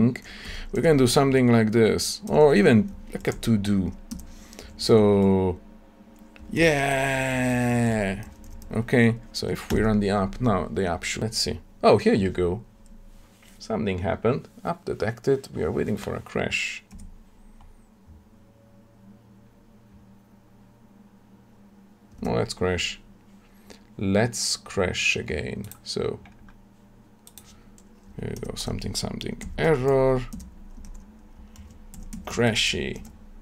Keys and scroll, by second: 4.1 Tab, 9.6 shift+F10, 30.3 Tab.